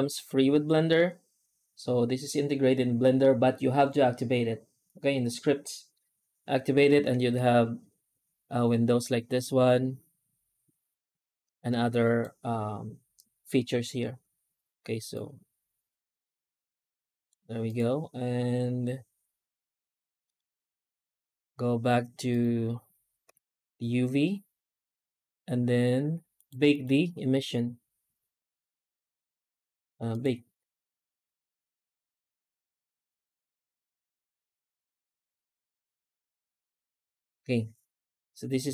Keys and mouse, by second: 7.0 shift+a, 11.3 click, 15.1-17.1 drag, 17.5-20.2 drag, 22.2-23.2 drag, 26.2 right click, 26.6 shift+right click, 29.9-34.9 drag.